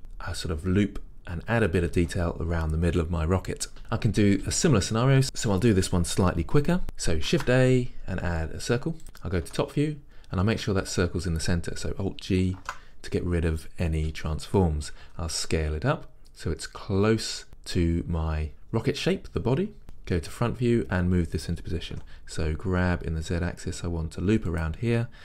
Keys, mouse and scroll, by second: 6.1-6.8 scroll down 1, 6.8 a, 9.0 shift+a, 9.5 KP_7, 12.6 alt+g, 15.1 s, 17.5 click, 19.9 KP_1, 22.1 g, 24.7 click.